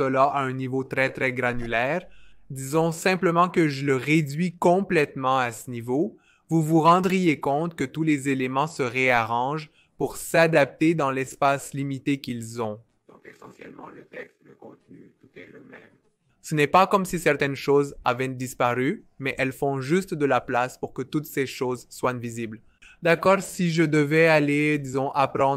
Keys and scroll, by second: 22.5-23.5 typing, 22.7 Return.